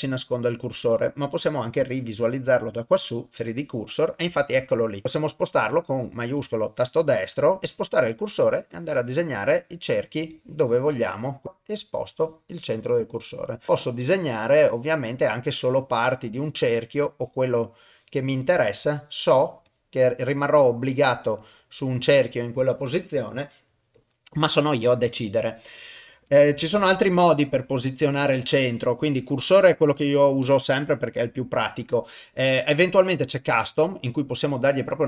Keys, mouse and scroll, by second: 6.5 shift+middle click, 7.4 shift+right click, 7.6 KP_0, 7.6 click, 8.4 click, 9.4 click, 10.3 click, 11.4 shift+right click, 12.1-13.6 drag, 13.7 ctrl+z, 14.2-15.5 drag, 16.3 click, 17.1 click, 17.9 click, 18.4 click, 18.9 click, 19.3 click, 19.7 click, 20.3 click, 20.9 click, 21.4 click, 21.8 click, 22.1 click, 26.3 click, 28.8-35.0 drag.